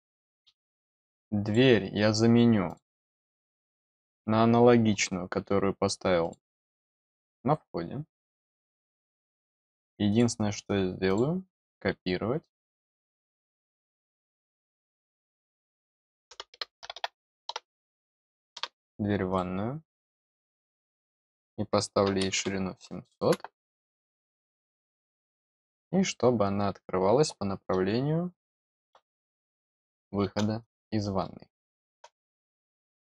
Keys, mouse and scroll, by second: 0.4 scroll down 1, 1.3 click, 2.6 click, 3.7 scroll up 1, 3.9 middle click, 4.5 middle click, 4.8 middle click, 5.2 middle click, 6.1 click, 8.2 click, 9.2 click, 10.0 click, 11.0 click, 12.8 click, 14.0 click, 14.5-15.6 drag, 19.2 click, 21.0 click, 23.6 click, 30.5 click, 31.1 middle click, 32.4 middle click.